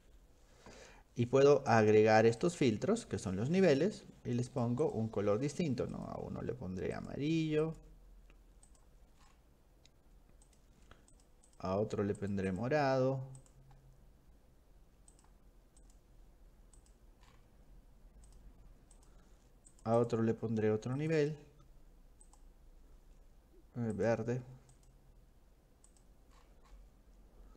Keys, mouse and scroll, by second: 1.8 click, 2.4 shift+click, 3.2 click, 4.5 click, 4.8 click, 5.9 click, 7.0 click, 7.6 click, 8.7 click, 9.2 middle click, 9.2 scroll down 2, 10.5 click, 11.1 click, 11.5 click, 12.2 click, 12.5 click, 13.4 click, 15.2 click, 15.8 click, 16.8 click, 17.3 scroll down 1, 18.3 click, 19.0 click, 19.7 click, 20.0 click, 21.0 click, 22.3 click, 24.0 click, 24.7 click, 25.9 click, 26.4-26.9 scroll down 4.